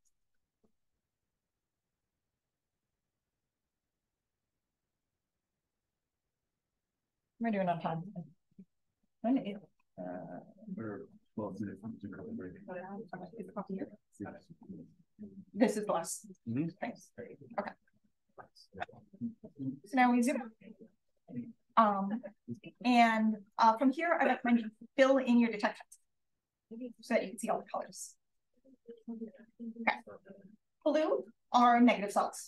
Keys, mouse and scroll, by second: 0.4 click, 16.9 click, 20.7-21.2 scroll up 1, 21.2-23.5 scroll down 1, 23.5-24.3 scroll down 1, 24.3-26.0 scroll down 1, 26.0 click, 26.0-27.9 scroll down 1, 27.9-30.4 scroll down 1, 30.4-31.0 scroll down 1.